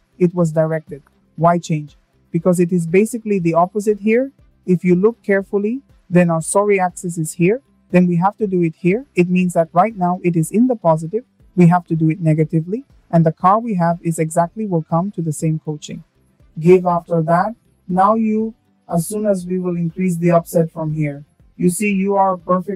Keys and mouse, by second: 2.2 middle click, 2.9 shift+middle drag, 11.0 click, 12.6-13.2 shift+middle drag, 13.6 shift+middle drag, 17.3-21.6 drag.